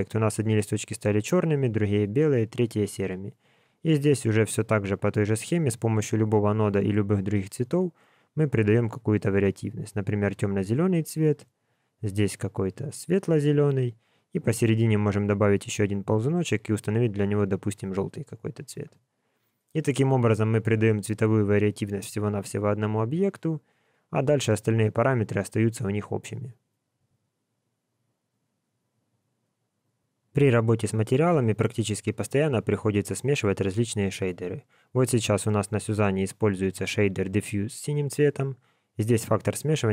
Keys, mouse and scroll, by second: 3.4 shift+a, 7.3 click, 10.7 click, 11.4 click, 14.7 click, 15.5 click, 23.4 click.